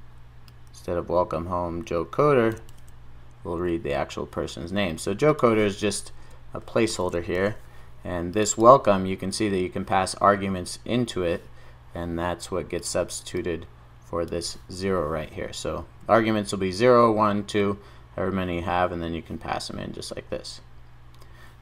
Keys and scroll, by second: 2.7 super+v, 7.4 super+s.